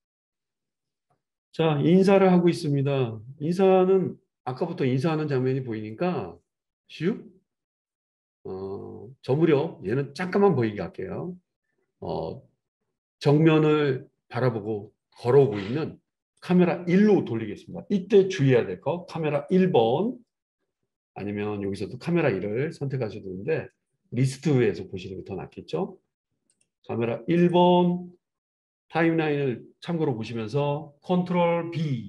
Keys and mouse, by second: 2.8-7.8 drag, 15.6-19.4 right drag, 19.4-26.6 middle drag, 26.6-32.0 drag.